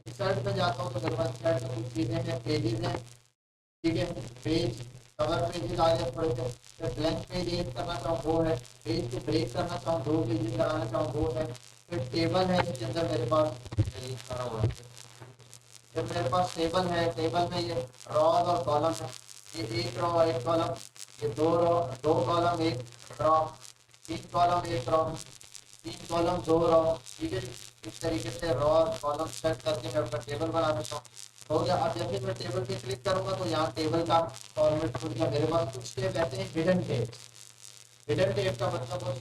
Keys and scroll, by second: 13.9 ctrl+a.